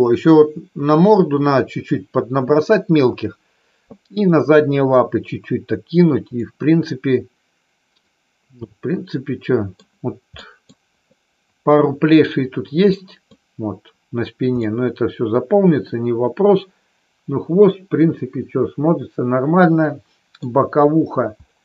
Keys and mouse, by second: 6.3-9.8 middle drag, 10.3 middle click, 12.9 middle click, 14.6-20.3 middle drag.